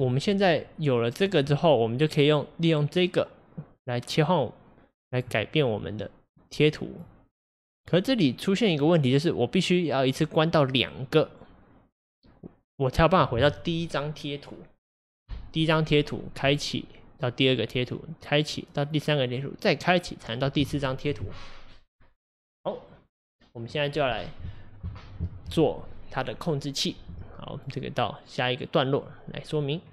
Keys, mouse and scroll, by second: 0.3-5.2 drag, 5.8-29.9 drag.